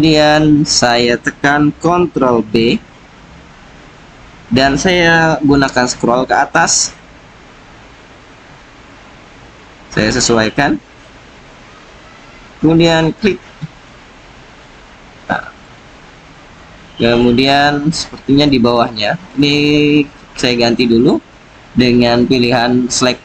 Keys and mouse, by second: 2.3 ctrl+b, 11.2 click, 13.7 click, 14.6-15.6 drag, 16.0-17.1 drag, 17.6 click, 17.8 middle click, 20.7 click.